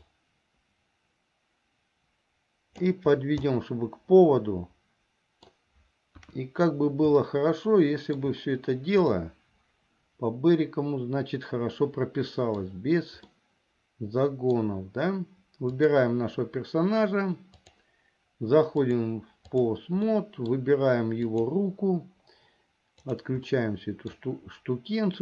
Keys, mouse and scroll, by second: 0.1-3.0 drag, 3.7-5.7 middle drag, 6.4 KP_1, 7.4-12.8 middle drag, 7.4 scroll up 1, 8.3-9.3 scroll down 1, 13.5-14.7 middle drag, 15.7 click, 18.9 click, 20.2 middle click, 21.5 click, 23.2 click, 23.6 middle click.